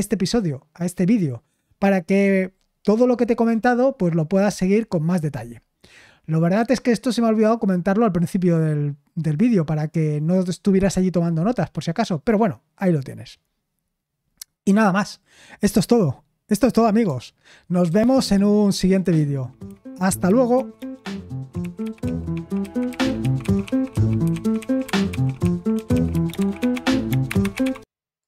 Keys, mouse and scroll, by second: 17.8 super+x, 28.2 click.